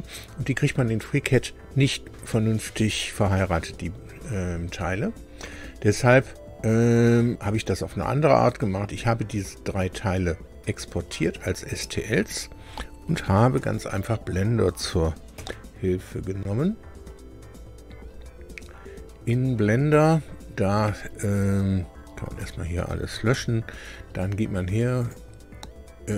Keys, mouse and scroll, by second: 13.5 ctrl+alt+b, 15.3 1, 19.7 Escape, 22.3 a, 23.3 Delete, 24.9 right click.